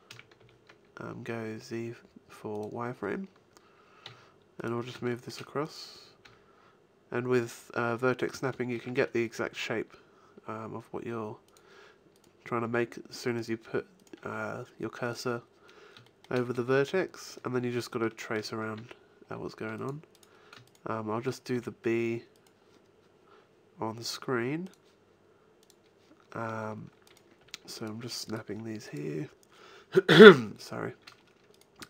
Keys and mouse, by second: 0.0 a, 0.3 s, 2.6 click, 4.0 g, 4.4-5.7 drag, 5.7 middle click, 6.2 g, 6.6 click, 8.2 middle click, 9.4 g, 11.6 click, 12.6 g, 14.2 g, 16.8 a, 18.7 ctrl+r, 21.5 s, 26.3 middle click, 27.0 click, 27.4 g, 28.4 g.